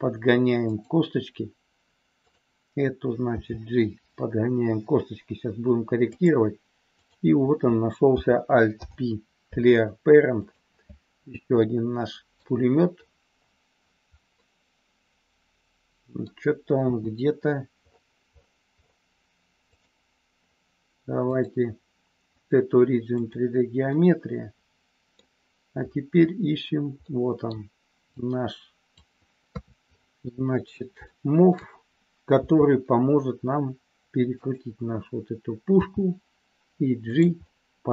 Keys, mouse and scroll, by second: 0.6 click, 2.1 click, 3.2 g, 6.1 click, 6.9 click, 8.6 alt+p, 11.5 middle click, 14.4-16.2 middle drag, 16.8 KP_7, 21.4-23.4 drag, 23.9-25.1 middle drag, 27.0 middle click, 28.1 click, 29.4 KP_3, 31.0 middle click, 32.2 r, 35.8 g, 37.4 scroll up 1, 37.5-37.9 middle drag.